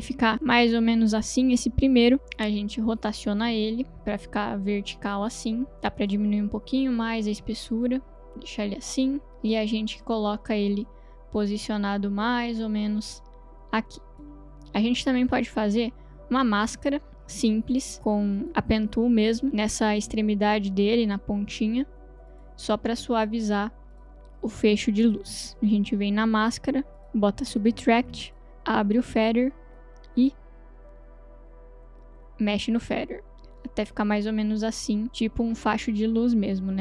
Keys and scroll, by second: 3.0 r, 26.1 m, 27.9 m, 29.0 f.